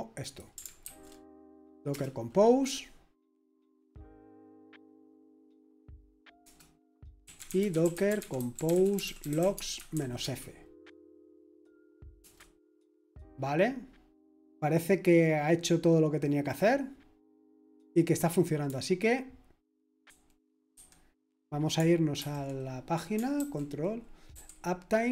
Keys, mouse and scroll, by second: 0.8 ctrl+alt+v, 1.9 Return, 6.4 Return, 7.0-10.4 typing, 12.2 typing, 20.0 super+2, 20.7 super+1, 22.2 super+8, 23.4 ctrl+t, 24.3 typing.